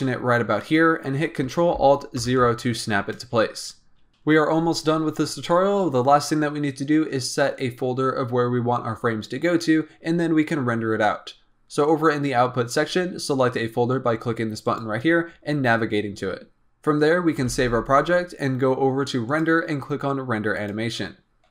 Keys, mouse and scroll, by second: 0.5-2.1 scroll down 1, 2.1 ctrl+alt+KP_0, 3.2-4.1 scroll up 2, 14.5-16.6 drag, 17.4 ctrl+s, 19.2-21.5 drag.